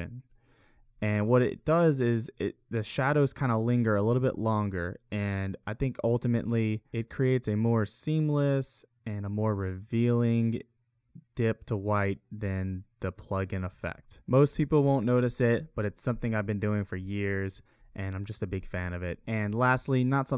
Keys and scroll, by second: 0.3 ctrl+z, 3.7 ctrl+z, 6.3 space, 12.5 space, 14.0 space.